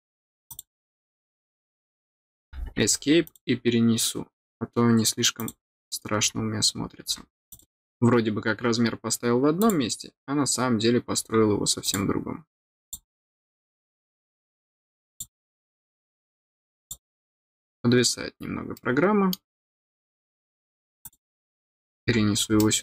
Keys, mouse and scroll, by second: 0.4 click, 3.2 click, 5.3 click, 7.5 click, 9.5 click, 11.8 click, 12.8 click, 15.1 click, 16.8 click, 18.7 middle click, 21.0 click, 22.5 middle click.